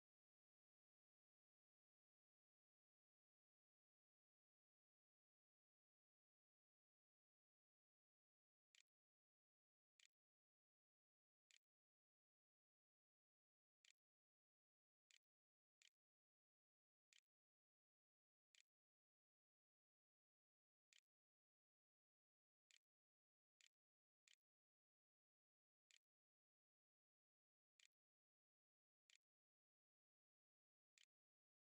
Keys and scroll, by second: 5.9-25.6 typing, 25.7 Tab, 27.6-31.6 typing.